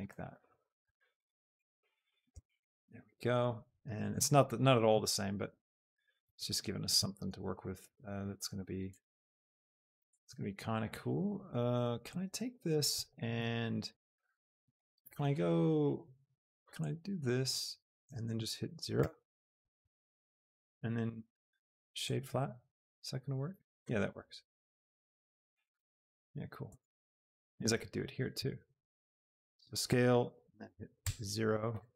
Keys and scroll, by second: 4.9 Tab, 6.3 Tab, 10.4 shift+Tab, 19.9 Return, 22.8 Tab, 25.8 shift+Tab, 26.9 Tab, 30.9 KP_0, 31.6 Return.